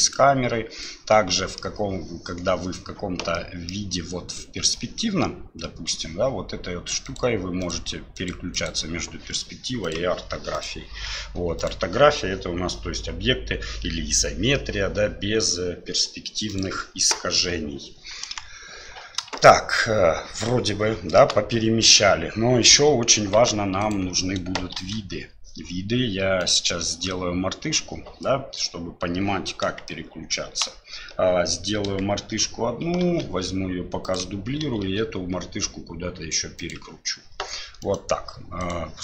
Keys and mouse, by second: 0.0 click, 1.1 middle click, 3.3 middle click, 7.0 click, 7.6 click, 8.1 click, 8.5 click, 9.8 click, 10.5 click, 11.6 click, 16.5 click, 18.2 KP_1, 19.3-21.2 shift+drag, 23.4 x, 24.8 shift+a, 29.9 shift+click, 33.0 shift+d, 34.6 r, 37.8 right click, 38.6 right click.